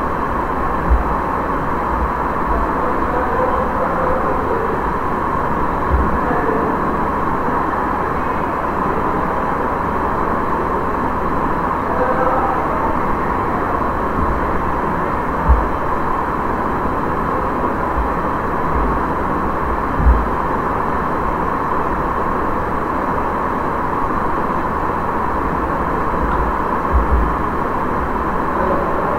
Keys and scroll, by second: 18.6 space, 26.1 Delete.